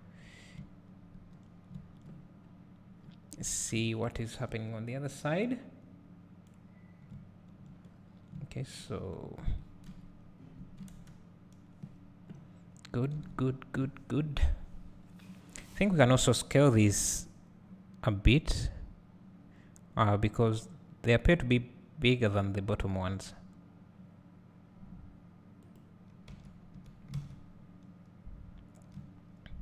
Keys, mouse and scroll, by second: 3.3 scroll up 1, 3.7 `, 7.9-8.3 scroll down 2, 9.9 KP_1, 10.9 KP_0, 15.7 click, 16.8 s, 25.8 click, 26.8 Tab, 27.2 alt+a, 28.9 `.